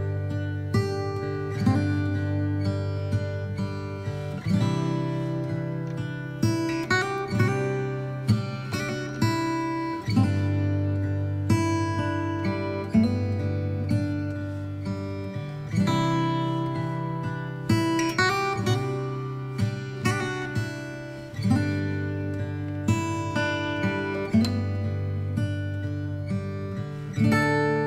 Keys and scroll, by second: 10.6 alt+x, 11.3 v, 23.3 Left, 24.0 ctrl+j.